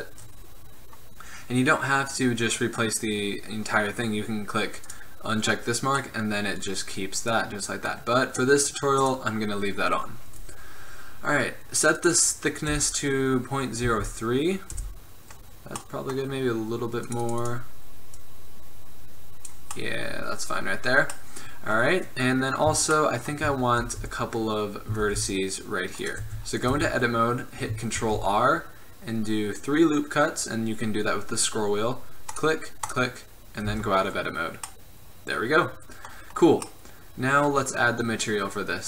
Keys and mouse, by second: 5.0-6.1 drag, 6.1-8.4 middle drag, 9.1-10.9 drag, 10.9-11.9 middle drag, 11.9-13.7 drag, 15.7-17.2 middle drag, 17.2-19.9 drag, 24.0 Tab, 25.1 ctrl+r, 26.4 Tab, 26.9 Tab, 28.1 ctrl+r, 33.8 Tab, 34.8-35.6 drag, 35.6-36.0 middle drag, 38.7-38.8 middle drag.